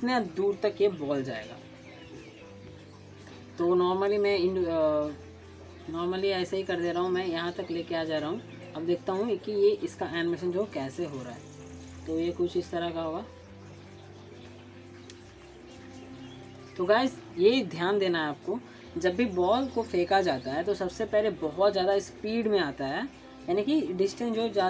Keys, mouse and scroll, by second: 0.8 scroll down 1, 1.0 alt+middle click, 9.2-10.8 drag, 14.6 click, 18.9 click.